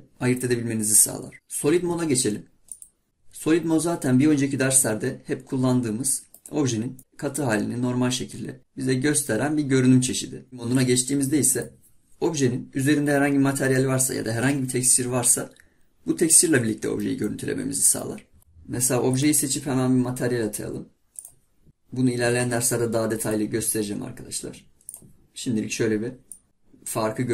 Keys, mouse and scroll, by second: 2.8 click, 3.1-4.2 middle drag, 7.0-8.6 middle drag, 11.8 click, 12.7-13.2 scroll down 1, 13.2-13.5 scroll up 1, 13.5-15.4 scroll down 1, 15.4-18.4 middle drag, 19.1 click, 20.5 scroll down 2, 21.2 click, 21.7-25.7 drag.